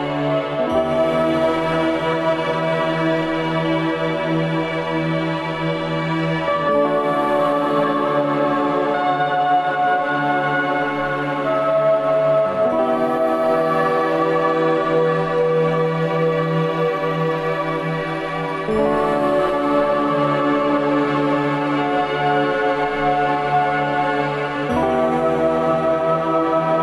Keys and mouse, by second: 1.6-3.4 middle drag, 8.4 click, 10.1 click, 11.0 click, 13.5 ctrl+s, 18.2 click, 23.9-25.2 drag.